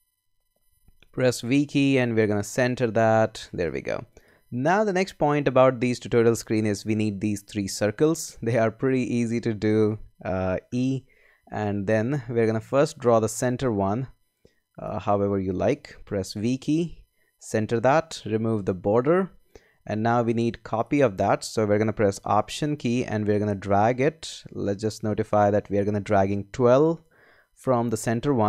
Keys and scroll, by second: 0.7 v, 10.7 e, 11.4 shift+e, 16.2 v.